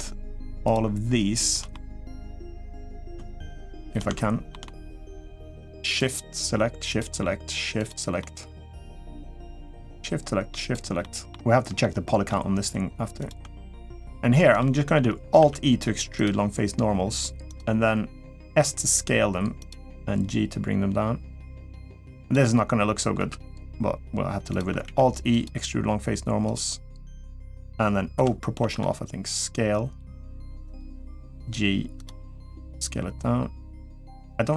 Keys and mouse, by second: 0.4 shift+click, 1.5 middle click, 2.4 middle click, 3.6 shift+click, 3.9 shift+middle click, 4.4 middle click, 6.6 shift+click, 8.0 shift+middle click, 9.5 shift+click, 10.4 shift+click, 10.8 shift+middle click, 11.6-13.1 middle drag, 13.8 middle click, 14.4 shift+middle click, 15.3 alt+e, 18.2 s, 19.6 g, 22.9 s, 24.8 alt+e, 27.9 o, 28.4 s, 30.7 g, 32.1 s.